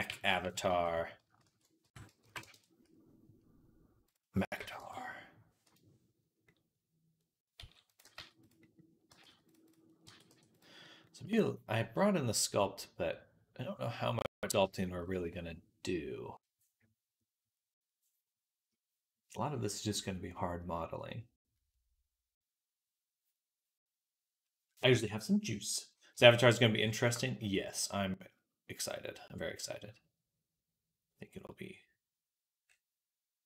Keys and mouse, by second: 0.5 alt+g, 1.3 alt+r, 7.4-27.1 middle drag, 7.4 s, 7.9 g, 8.9 g, 9.9 g, 32.5-33.4 middle drag.